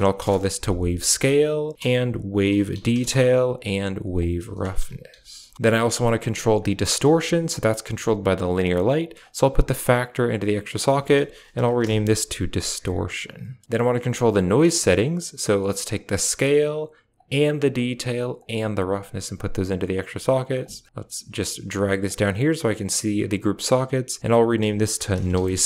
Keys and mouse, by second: 1.1-5.5 drag, 5.7 middle click, 6.5-8.4 drag, 9.1-9.9 drag, 10.6 click, 10.7 click, 13.6 ctrl+z, 14.0 click, 14.8 click, 15.9 click, 17.0-17.7 drag, 18.2-19.0 drag, 19.3 click, 20.5 click, 21.9 drag, 23.3 click, 23.4-25.6 drag.